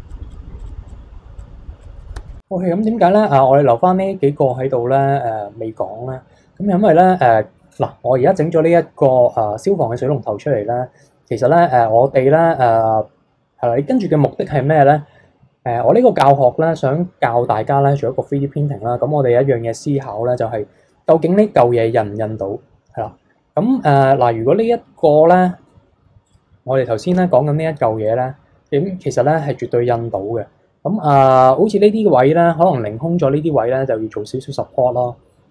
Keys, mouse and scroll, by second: 0.6 click, 1.4 click, 2.0 middle click, 2.1 KP_2, 2.3 scroll down 1, 2.3 middle click, 2.5 KP_3, 3.1 click, 4.5 click, 5.0-8.1 middle drag, 10.3-11.1 scroll down 1, 11.1-11.4 scroll up 2, 11.4-14.5 middle drag, 23.9 click, 25.0 click, 26.2 click, 27.1 shift+h, 28.1-29.3 middle drag, 29.3 KP_3.